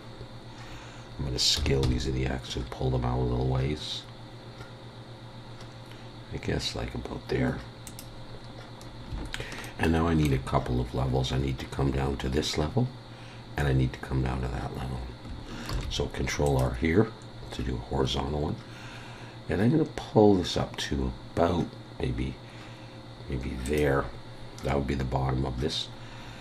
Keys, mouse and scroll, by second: 0.8-1.6 scroll up 1, 1.6 s, 9.6 shift+middle click, 15.7 ctrl+r.